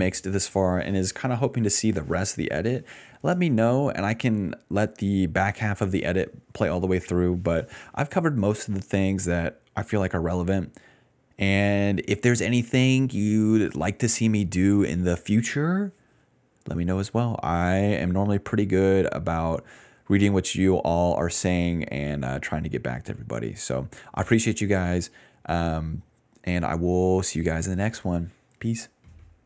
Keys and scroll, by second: 12.3-13.1 typing.